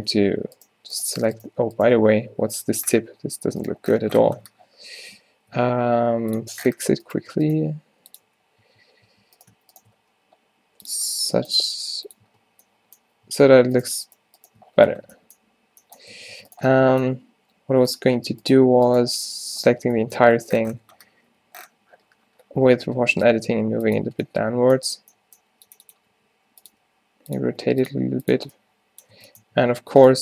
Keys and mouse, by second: 0.0 Tab, 2.4 -, 4.7 o, 5.6 s, 7.1-10.8 drag, 7.6 g, 8.3 f, 8.7 Tab, 9.1 Tab, 10.0 g, 11.6 g, 12.3 Tab, 13.3 Tab, 14.7 middle click, 16.2 Tab, 16.4 Tab, 17.2 g, 19.7 o, 20.0 click, 21.4 g, 23.1-24.3 middle drag, 26.2 r, 26.8 g, 27.6 r, 28.0 g, 28.5 Tab, 29.3 Tab, 29.6 Tab.